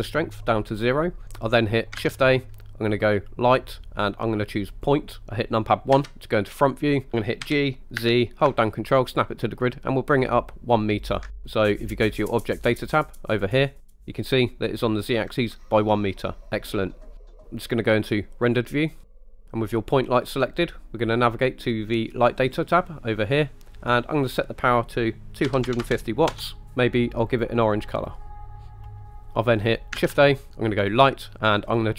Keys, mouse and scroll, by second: 0.2 click, 2.0 shift+a, 6.0 KP_1, 7.5 g, 8.0 z, 11.1-13.7 ctrl+drag, 16.5-17.2 middle drag, 18.6 click, 19.4 scroll down 2, 22.4 click, 24.2-26.4 drag, 27.3 click, 30.1 shift+a.